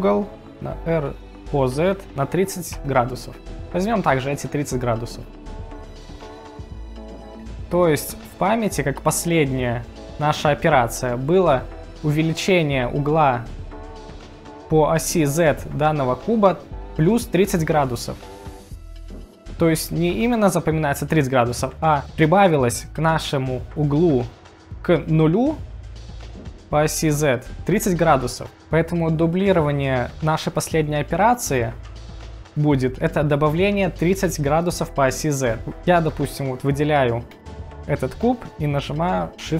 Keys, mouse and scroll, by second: 0.5 r, 1.1 z, 2.8 0, 3.2 click, 37.3 click.